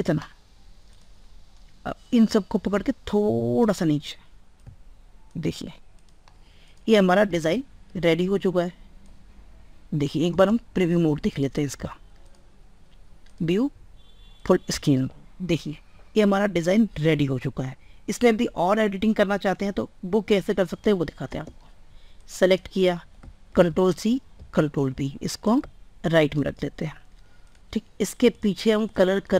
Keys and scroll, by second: 7.1 ctrl+s, 23.2 ctrl+c, 24.4 ctrl+v.